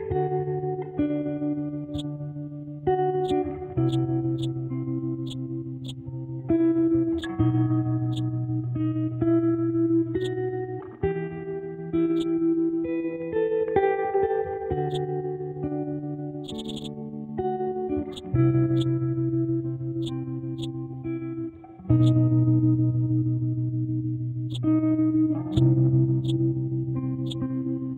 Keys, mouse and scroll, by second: 1.7 Left, 1.9-8.1 shift+drag, 10.2-11.3 drag, 11.3-12.1 scroll up 1, 12.1 click, 12.9 scroll down 1, 14.3 scroll up 1, 14.9 click, 15.6-16.4 scroll down 1, 16.4 click, 18.1-21.9 drag, 22.0-23.4 drag, 24.5-27.9 drag.